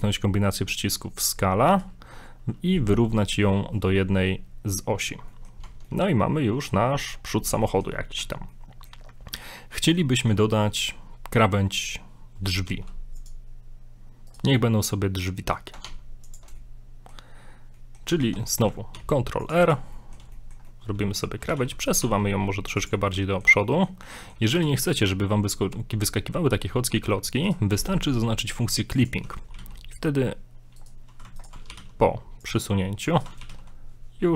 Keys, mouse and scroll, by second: 5.2 scroll down 2, 5.3 middle click, 5.7 Tab, 5.9 middle click, 7.0 shift+middle click, 7.2 scroll up 1, 7.7 shift+middle click, 8.2 Tab, 8.5 middle click, 9.3 scroll up 1, 9.8 middle click, 10.2 shift+middle click, 10.7 middle click, 12.7 ctrl+r, 14.6 middle click, 15.9 ctrl+Tab, 16.6 middle click, 17.3 scroll up 1, 17.8 middle click, 18.2 ctrl+z, 18.4 middle click, 18.5 scroll down 1, 19.0 ctrl+r, 19.9 middle click, 20.4 shift+middle click, 20.7 middle click, 21.5 g, 23.1 middle click, 23.7 shift+middle click, 24.2 middle click, 24.6 g, 29.0 click, 29.5 g, 31.4 alt+right click, 31.7 alt+right click, 31.7 g, 33.2 alt+right click, 33.4 alt+right click, 33.6 g.